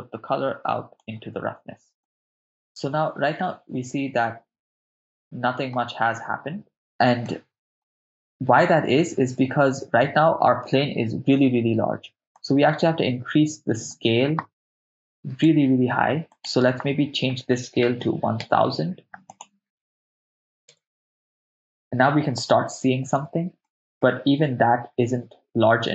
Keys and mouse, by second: 2.0 middle click, 7.2-10.3 middle drag, 12.4-15.5 drag, 16.3-18.6 drag, 18.1 0, 19.3-20.7 drag, 20.1 0, 20.3 0, 23.7 middle click.